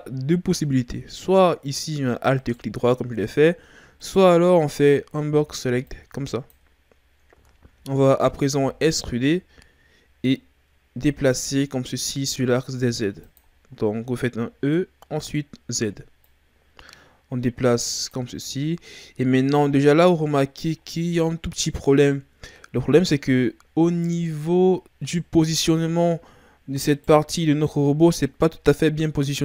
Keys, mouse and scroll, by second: 2.3-5.3 right drag, 5.3 b, 7.5-8.5 shift+scroll down 5, 8.5 e, 13.5-14.6 scroll down 8, 14.6-16.2 scroll up 2, 16.2 click, 18.4-20.8 shift+scroll up 14, 20.8-21.9 scroll down 4, 21.9-24.2 scroll up 2, 24.6-26.8 scroll down 4, 26.8 right click.